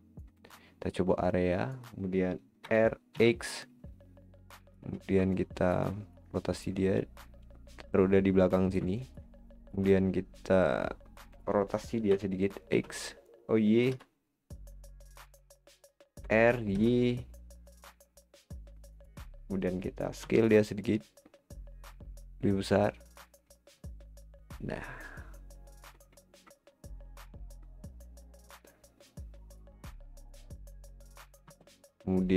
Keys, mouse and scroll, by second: 0.5 click, 2.7 r, 5.0-5.3 scroll up 4, 5.3-6.9 middle drag, 6.9 click, 9.0-12.1 shift+middle drag, 12.1 r, 16.3 r, 20.2 s, 23.5-23.9 scroll down 6, 23.9-26.1 middle drag, 26.1-26.5 scroll up 6, 26.5-29.1 middle drag, 29.1 click, 30.3 click.